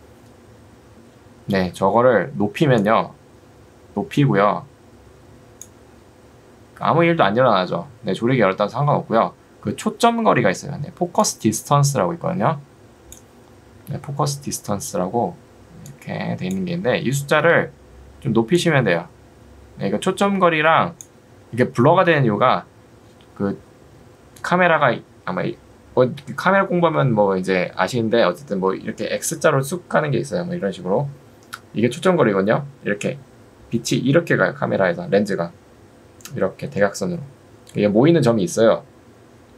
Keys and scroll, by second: 1.8 Escape, 13.8 Escape, 17.6 Escape.